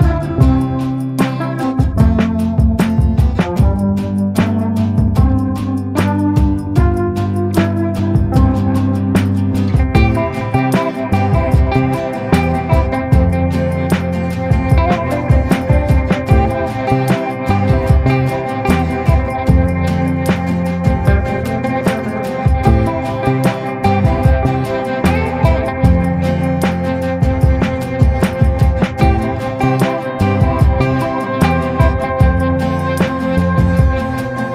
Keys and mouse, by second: 0.4 click, 0.9 ctrl+z, 1.1 click, 1.6 ctrl+z, 1.8 click, 2.2 ctrl+z, 2.4-5.8 drag, 6.6 click, 9.1 click, 9.6 ctrl+z, 10.1 click, 11.0 click, 11.4 ctrl+z, 11.7 click, 15.0 middle click, 16.0-17.1 middle drag, 17.8 middle click, 18.5 shift+middle click, 19.2 shift+middle click, 19.7 shift+middle click, 23.0 click, 23.0 ], 24.6 ctrl+z, 24.6 click, 25.4 click, 26.0 click, 26.6 click, 27.0 click, 31.0 click, 32.5 click, 32.5 ], 33.3 ctrl+z, 33.5-34.0 [, 34.1 click.